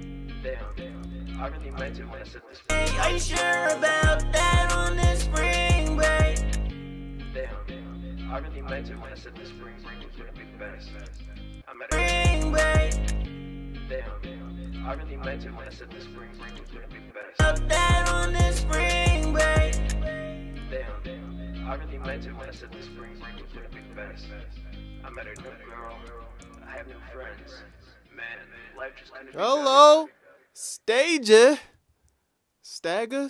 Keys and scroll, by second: 0.8 super+a, 1.7 typing, 2.6 super+s, 16.4 typing, 22.1-23.0 typing, 24.8-25.6 typing, 26.0 ctrl+super+w, 26.5 super+s, 27.7 super+Tab, 28.5 super+Tab, 31.7 super+Tab.